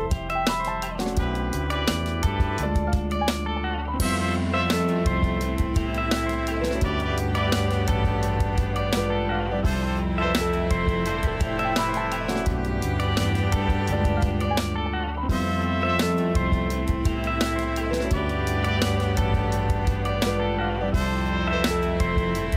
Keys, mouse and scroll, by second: 3.3 Tab, 3.7 1, 4.1 click, 4.6 2, 4.8 click, 5.4 g, 11.3 a, 11.5 a, 12.3 Tab, 13.3-14.0 scroll up 3, 14.0-16.2 scroll down 2, 16.2 a, 16.4 a, 17.3 shift+a, 22.4 Tab.